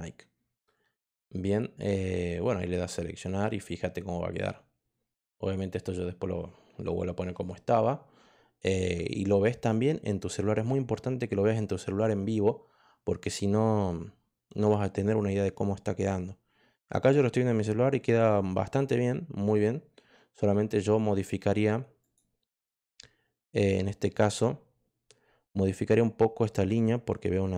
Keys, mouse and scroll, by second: 21.9 click, 23.5 click.